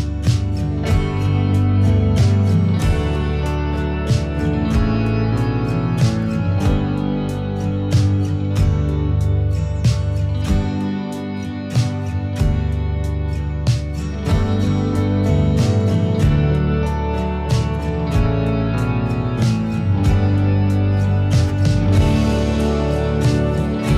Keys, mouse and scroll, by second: 0.0 click, 1.6-2.4 drag, 2.6 click, 5.9 middle click, 6.6 click, 7.3 middle click, 7.8 click, 8.8 click, 10.2 scroll down 1, 10.2-11.3 middle drag, 11.3 click, 13.6-14.8 middle drag, 14.8-15.4 drag, 16.5 click, 17.2-18.9 middle drag, 18.7 click, 19.0-20.1 middle drag, 20.1 scroll up 1, 20.2 click, 21.6 scroll down 1, 21.7 middle click, 22.3 click.